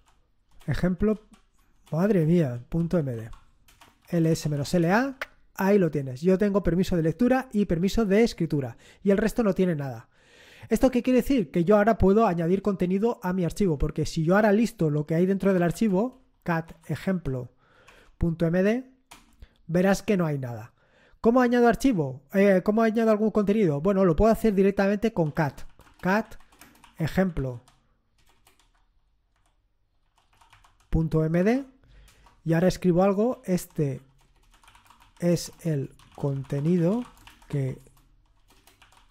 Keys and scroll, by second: 0.0-5.4 typing, 3.6 Return, 15.1-17.6 typing, 17.8 Tab, 19.0 Return, 25.0-31.8 typing, 32.0 Return, 33.0-39.1 typing.